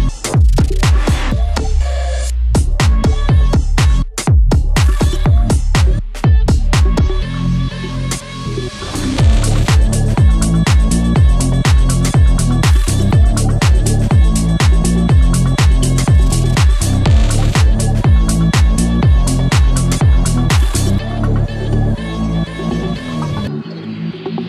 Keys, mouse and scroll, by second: 1.0 scroll up 1, 1.3 click, 2.4 t, 2.8 ctrl+z, 3.1 click, 4.1 t, 4.4 click, 5.1-5.6 scroll up 1, 5.6-6.8 drag, 6.8-7.3 scroll up 1, 7.3-8.6 drag, 8.6-9.0 scroll up 1, 9.0-10.8 drag, 10.8 scroll up 1, 11.4-11.8 scroll down 1, 11.8 scroll up 1, 13.1-15.4 drag, 15.4 scroll down 1, 16.3 scroll up 1, 16.6 click, 17.1 ctrl+c, 17.5-18.7 drag, 18.7 click, 19.8 Tab, 22.0 Tab, 22.2 shift+click, 22.6 b, 23.0 click, 23.4-24.2 scroll up 1.